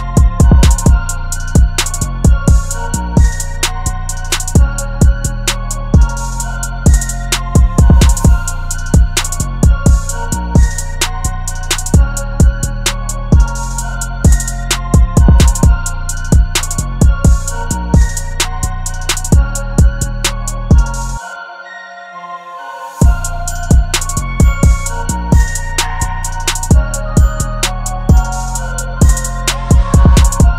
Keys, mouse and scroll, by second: 0.0 Return, 0.3 Up, 2.1 Up, 3.8 ctrl+t, 5.5 Return, 6.0 Up, 6.6 Left, 10.3 ctrl+t, 14.2 Return, 14.7 Left, 14.9 Left, 15.1 Left, 17.9 ctrl+click, 22.9-23.6 typing, 24.7 double click.